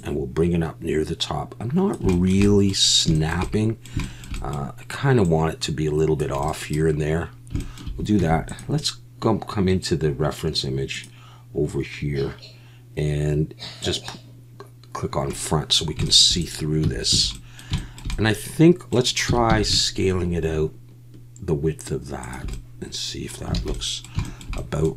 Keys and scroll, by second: 8.2 Tab, 16.8 Tab, 17.1 a, 19.3 s, 19.5 x, 23.6 alt+a.